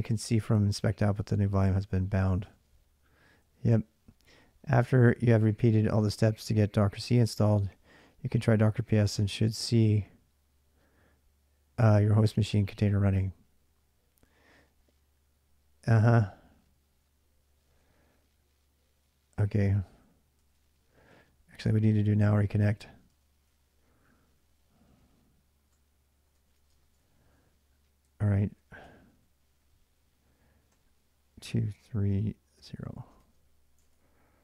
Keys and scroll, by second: 0.0-3.2 typing, 4.6 k, 4.8 k, 5.6 k, 7.0 j, 7.2 j, 8.2-9.6 typing, 16.8-17.3 j, 17.5 j, 18.8-34.4 typing, 26.7 ctrl+[, 26.8 ctrl+j, 33.6 ctrl+[.